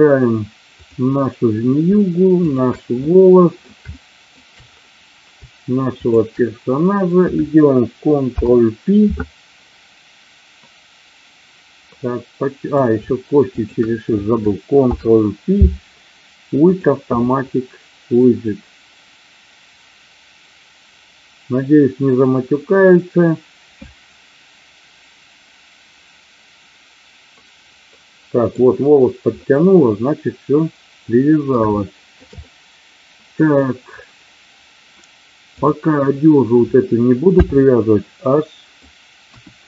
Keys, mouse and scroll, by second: 2.4 shift+click, 3.0-3.6 middle drag, 3.8-4.2 shift+middle drag, 6.0 shift+click, 8.2 ctrl+p, 12.1-12.7 middle drag, 13.5 shift+click, 14.8 ctrl+p, 27.9 middle click, 29.5-31.5 middle drag, 31.7-32.1 shift+middle drag, 32.3-33.5 middle drag, 37.2 h, 38.0-38.7 middle drag, 39.2 KP_1.